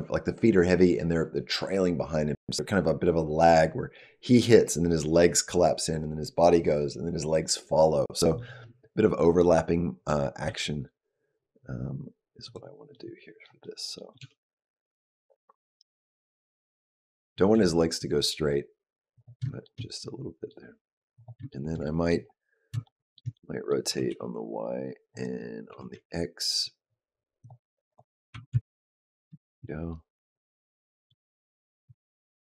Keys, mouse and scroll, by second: 9.2 middle click, 10.2 g, 12.7 middle click, 13.4 middle click, 14.0 g, 16.2 middle click, 17.3 g, 19.6 shift+middle click, 21.0 click, 21.3 shift+middle click, 21.7 middle click, 22.1-22.6 scroll up 3, 22.7 shift+middle click, 23.2 middle click, 23.7 r, 25.7 r, 27.7 click, 28.2 r, 29.2 shift+middle click, 29.5 middle click, 31.7 r.